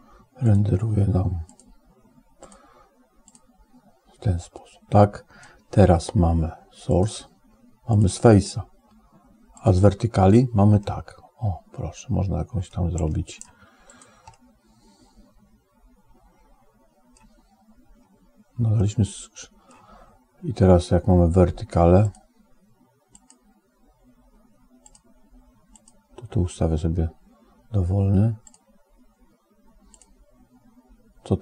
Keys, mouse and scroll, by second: 0.3-1.4 drag, 2.2-3.2 drag, 6.7 click, 7.7-9.8 drag, 10.7-12.6 middle drag, 12.9 right click, 14.2 middle click, 14.6 click, 15.2-17.1 middle drag, 18.6-19.6 middle drag, 22.2 click, 23.3 click, 24.9 click, 25.8 click.